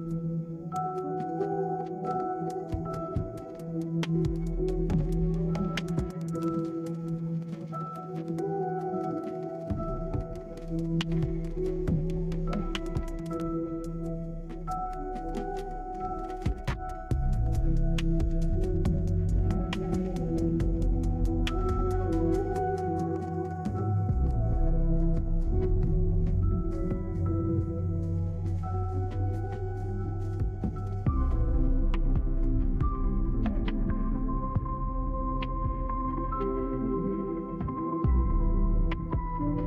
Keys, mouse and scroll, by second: 2.6 click, 3.9 click, 4.2-5.4 scroll down 3, 4.4 middle click, 7.0 click, 9.5 middle click, 11.8 click, 12.8 click, 13.5 click, 15.0-16.3 typing, 19.2 click, 19.7 click, 20.7 6, 21.0 Return, 23.5 click, 23.9-24.9 scroll down 3, 24.5 right click, 24.7 middle click, 24.9 middle click, 25.7 middle click, 28.1 right click, 30.0 click, 31.0 click, 32.1 right click, 33.1 middle click, 33.3 right click, 35.4 middle click, 35.9 scroll down 2, 36.0 middle click, 37.8 click, 38.2 right click, 39.4-39.6 drag.